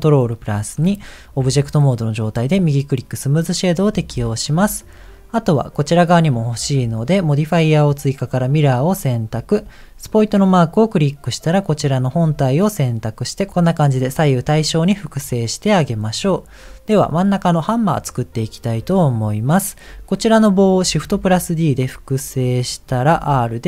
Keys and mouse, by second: 0.1 ctrl+2, 4.2 shift+middle click, 8.5 click, 10.3 click, 18.7 click, 21.0 shift+d, 23.1 r.